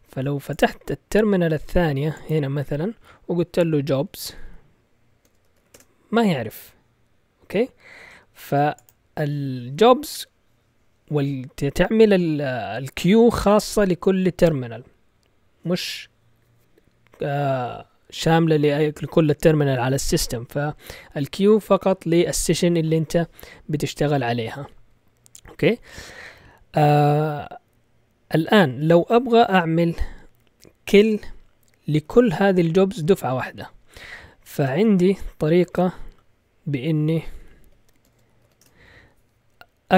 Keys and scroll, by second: 3.5-6.0 typing, 31.6-33.0 typing, 34.5 BackSpace, 34.6 BackSpace, 34.8 BackSpace, 35.6 ctrl+l, 37.0-38.9 typing.